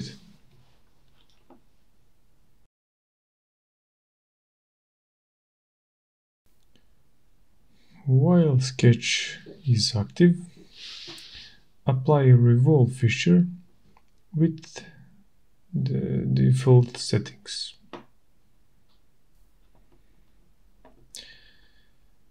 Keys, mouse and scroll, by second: 0.0 8, 0.2 Return, 3.0 click, 5.8 click, 7.3-9.1 scroll, 10.3 click, 11.0 click, 17.4 click, 20.5 click, 22.0-22.3 scroll.